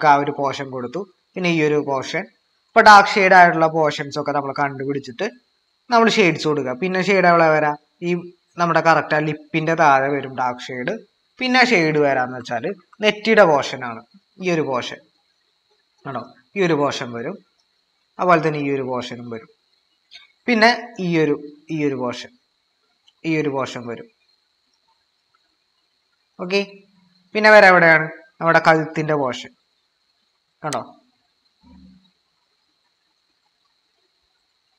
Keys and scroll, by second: 12.2 typing.